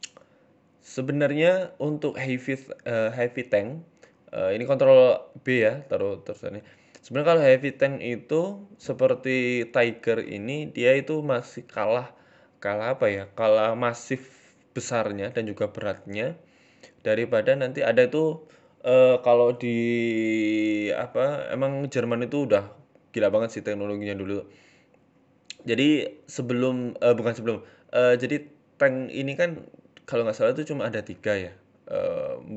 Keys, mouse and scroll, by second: 0.1 shift+middle click, 1.6 click, 1.6 scroll up 1, 2.0 ctrl+r, 3.1 ctrl+b, 5.3 g, 6.9 s, 7.8 r, 8.7 s, 9.8-10.4 scroll up 3, 10.1 click, 10.7 f, 11.3 g, 13.3 shift+middle click, 13.6 click, 14.9 shift+right click, 15.4 g, 17.5 Tab, 17.7 middle click, 17.9-18.9 scroll down 8, 18.2 middle click, 18.9 KP_7, 19.3 shift+middle click, 19.6-20.2 scroll up 3, 19.7 Tab, 20.2 click, 20.7 shift+middle click, 21.0 g, 22.4 g, 23.7 scroll down 3, 23.8 Tab, 24.1 middle click, 24.2 Tab, 24.7 KP_7, 25.2 click, 25.6-26.3 scroll up 4, 26.1 g, 27.8 scroll down 3, 27.9 z, 28.2 z, 28.9 middle click, 29.2 middle click, 29.4 Tab, 29.7 middle click, 30.6-31.1 scroll up 2, 30.7 middle click, 31.1 Tab, 31.5 right click, 31.9 KP_3.